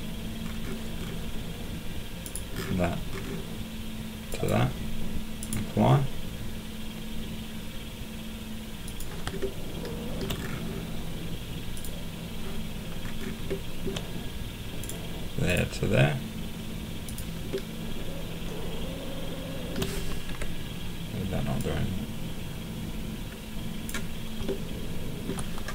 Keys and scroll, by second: 20.3 Escape.